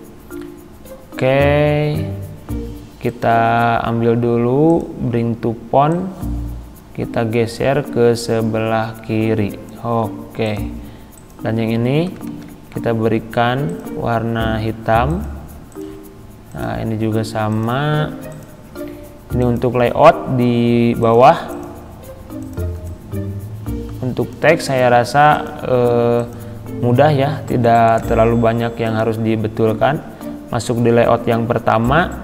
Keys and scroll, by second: 12.2 ctrl+a.